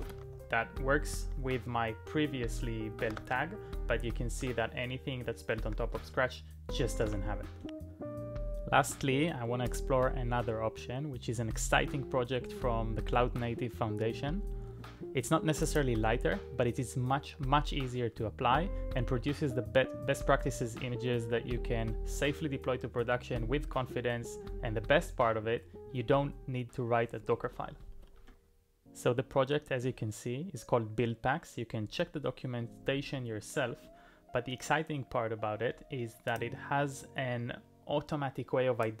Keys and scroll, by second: 0.0-0.5 typing, 3.1 ctrl+d, 7.0 alt+m, 7.9 Return, 7.9 typing, 27.8 typing.